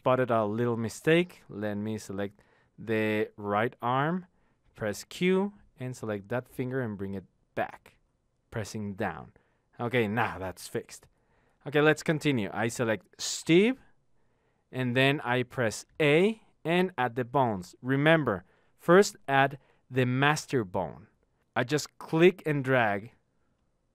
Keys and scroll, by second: 5.1 q, 7.2 Down, 16.0 a.